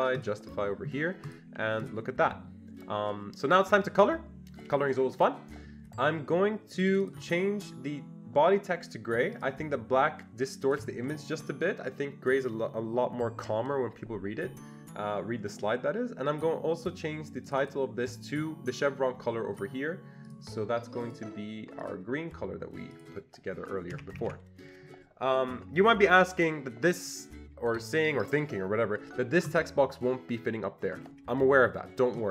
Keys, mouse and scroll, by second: 0.2 click, 1.3 click, 1.8 click, 6.8 click, 6.9 double click, 7.1 click, 9.3 click, 10.6 click, 17.4 click, 17.6 double click, 20.3 click, 21.1 click, 21.8 click, 22.9 click, 23.9 Escape, 24.1 Escape, 24.3 Escape, 29.4 Escape, 29.5 click.